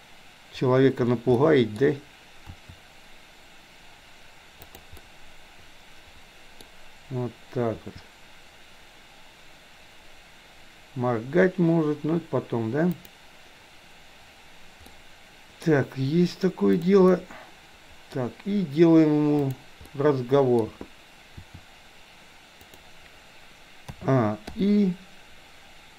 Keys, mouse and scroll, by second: 1.3 middle click, 2.6 r, 5.0-6.7 middle drag, 7.7 r, 15.0-15.6 middle drag, 17.1-18.1 middle drag, 18.1-18.7 scroll down 1, 19.5 click, 19.8-20.7 middle drag, 21.5 r, 24.0 a, 24.6 i.